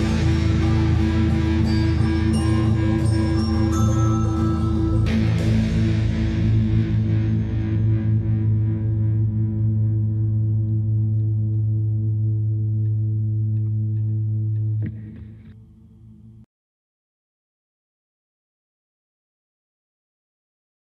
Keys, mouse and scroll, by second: 0.8-1.4 scroll down 1, 1.4 click, 4.7 scroll down 1, 5.5 shift+middle click, 6.5 click, 6.8-8.9 typing, 8.1 scroll up 1, 10.0 click, 11.1-12.4 typing, 12.5-13.0 scroll up 1, 13.7-14.0 scroll down 1, 14.3-14.7 scroll down 1, 14.9 shift+middle click, 16.1 click, 18.1 ctrl+s, 19.9 middle click, 20.3 scroll up 1.